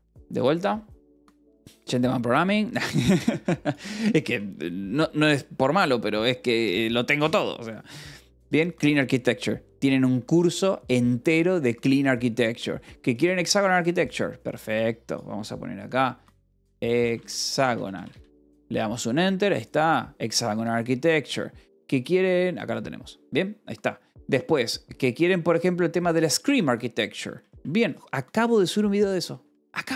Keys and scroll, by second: 4.2 space, 6.0 Up, 6.3 Down, 16.2-18.3 typing, 27.7 Right, 29.4-29.9 typing.